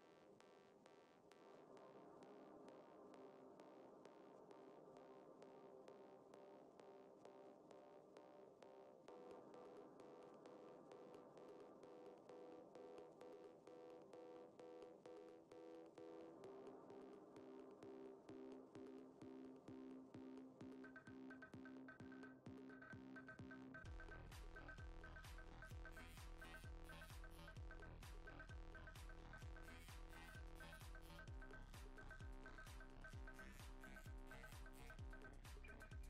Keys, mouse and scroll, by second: 0.3 click, 1.9 f, 3.6 click, 5.0 f, 11.3 click, 16.9 middle click, 17.7 scroll down 1, 18.0 middle click, 18.9 scroll down 1, 19.2 middle click, 21.2 ctrl+z, 21.4 click, 22.5 middle click, 24.3 click, 25.8 middle click, 29.0 click, 29.3 click, 30.7 click, 33.2 middle click, 34.0 ctrl+KP_3, 34.5 KP_1, 35.6 click.